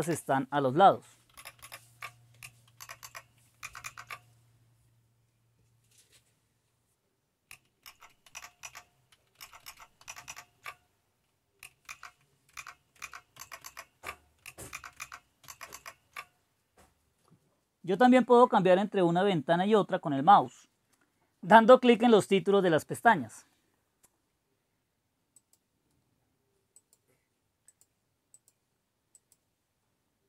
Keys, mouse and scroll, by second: 0.0 super+ñ, 1.4 super+j, 1.6 super+j, 2.9 super+Right, 3.1 super+Right, 3.7 super+Left, 3.8 super+Left, 7.8 super+Up, 8.3 super+Down, 8.6 super+Down, 9.4 super+Up, 9.7 super+Up, 10.0 super+Down, 10.2 super+Down, 12.0 super+Left, 12.5 super+Left, 13.0 super+Left, 13.4 super+Right, 13.6 super+Right, 14.7 super+Left, 15.0 super+Left, 15.5 super+Right, 15.7 super+Right, 25.4 click, 26.6 click, 27.6 click, 28.2 click, 29.0-30.2 drag.